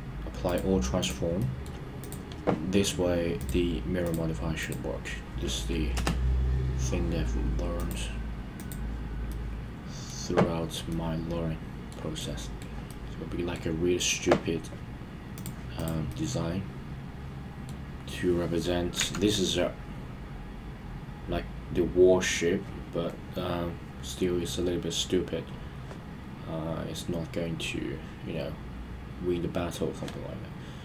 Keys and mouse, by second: 0.5 ctrl+a, 1.0 click, 1.4 middle drag, 2.0 click, 3.5-6.0 drag, 7.8 click, 8.6 click, 9.3-10.1 middle drag, 10.9-11.9 middle drag, 12.2-12.7 middle drag, 12.9-13.6 middle drag, 15.4 click, 16.1-17.7 middle drag, 19.0 KP_1.